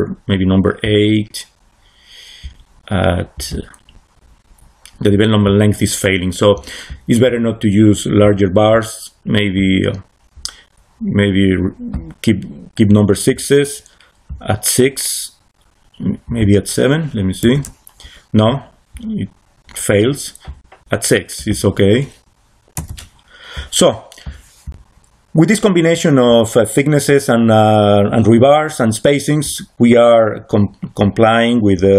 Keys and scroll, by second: 17.3 7, 17.4 Return, 22.7 6, 22.8 Return.